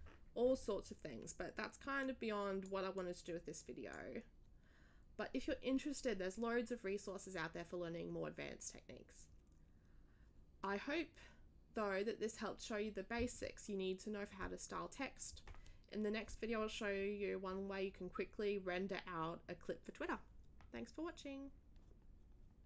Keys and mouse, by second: 2.0 click, 2.9-4.0 drag.